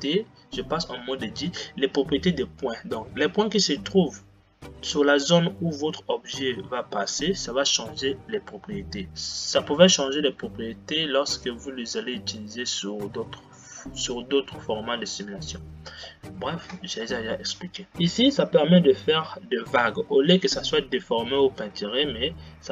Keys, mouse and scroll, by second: 0.1 Tab, 9.1 Tab, 17.9-19.4 drag.